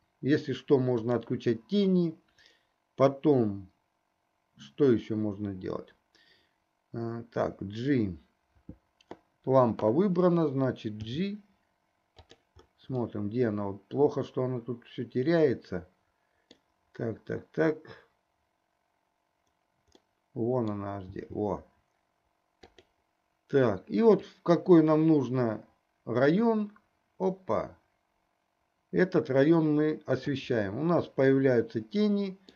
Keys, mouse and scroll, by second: 1.5 click, 11.1 g, 13.7-17.1 middle drag, 20.3-21.2 middle drag, 21.5 g, 24.3-30.6 drag, 31.4-32.5 middle drag.